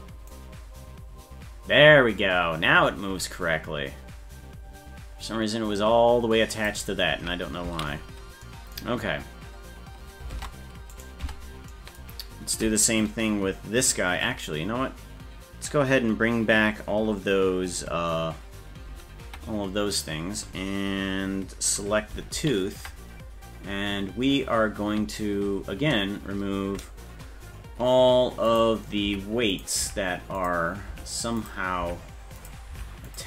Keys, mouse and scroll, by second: 0.3-6.7 drag, 7.9 ctrl+z, 10.3 ctrl+Tab, 11.0 right click, 11.2 Tab, 18.9 alt+h, 22.4 ctrl+l, 28.5 click, 29.1 Up, 29.5 click, 29.8 Up, 30.4 click, 30.9 Up, 31.4 click, 31.8 Up, 32.4 click, 32.7 Up, 33.1 click.